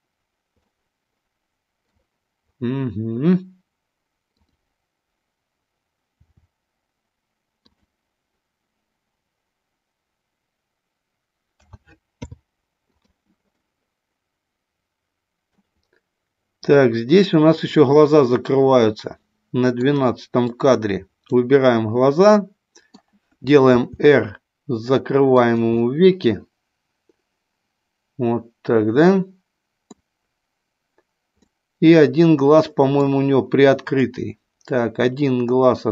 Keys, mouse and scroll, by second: 0.6-1.8 middle drag, 4.4 click, 6.1 r, 7.7 click, 11.5 a, 12.2 i, 13.6-15.6 middle drag, 17.3-19.8 middle drag, 20.5 click, 22.3 middle click, 23.7 r, 25.5 click, 25.7-29.9 middle drag, 31.3-33.0 middle drag, 33.9 click.